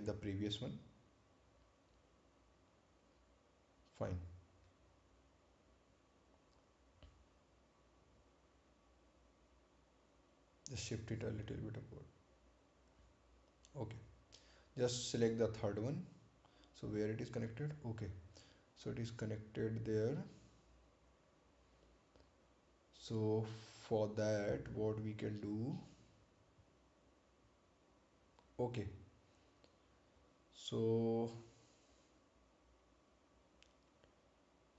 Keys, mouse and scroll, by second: 5.4 click, 7.4 right click, 10.2-10.7 scroll up 1, 10.9 click, 18.1-18.7 scroll down 1, 20.3 scroll up 1, 29.9-31.1 scroll up 1, 31.1 scroll down 1, 33.2 ctrl+click.